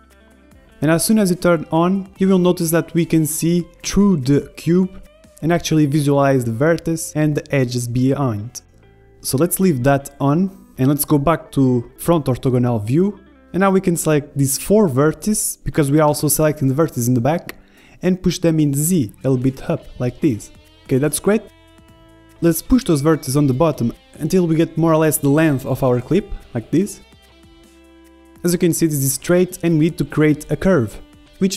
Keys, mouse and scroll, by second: 0.3-2.2 middle drag, 1.1-2.9 drag, 2.9 middle click, 3.2-8.8 drag, 8.0 KP_1, 8.8-10.0 middle drag, 10.0-11.0 drag, 11.0-13.2 middle drag, 13.2-14.2 drag, 13.2-14.8 typing, 14.2-15.6 middle drag, 14.3 ctrl+z, 16.0-18.0 drag, 22.0-24.2 middle drag, 22.4 a, 22.8 b, 23.5 g, 25.6-27.6 drag, 30.1-31.5 middle drag.